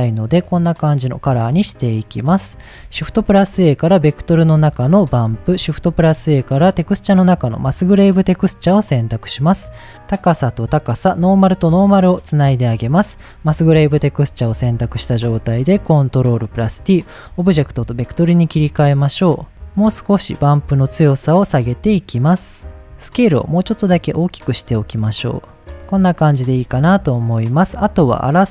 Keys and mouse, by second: 1.3 middle click, 2.4 middle click, 3.0 shift+a, 5.2 middle click, 5.6 shift+a, 9.5-9.9 drag, 11.6 click, 12.1-12.9 drag, 13.3 click, 13.7 middle click, 14.5 ctrl+t, 14.8 middle click, 15.9-16.5 drag, 17.5-17.9 shift+middle drag, 20.7-21.9 drag, 22.5 click, 23.3-25.1 drag, 26.7 shift+middle click, 27.4 shift+middle click, 28.3-28.5 drag.